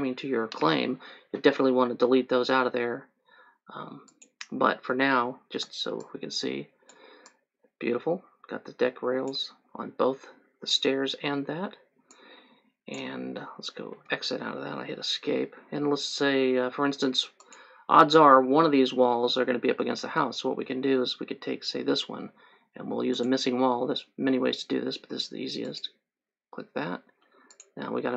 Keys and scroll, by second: 5.8 3, 14.1 Escape.